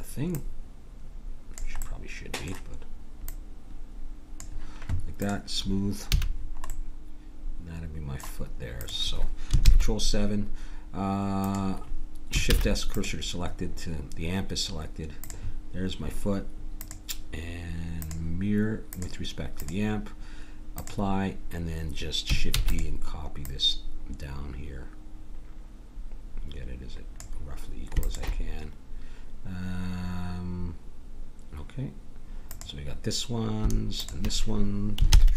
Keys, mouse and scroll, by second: 0.3-1.5 drag, 1.9 click, 1.9 right click, 2.1-3.2 middle drag, 3.2-4.3 drag, 3.2-4.3 right drag, 6.0 a, 6.7 click, 6.7 right click, 8.8-10.6 drag, 11.4-13.1 drag, 12.5 shift+s, 15.2-20.7 drag, 20.9-22.5 drag, 22.5 shift+d, 23.4-25.2 drag, 28.0-29.8 drag, 32.5-35.3 drag, 35.1 ctrl+j.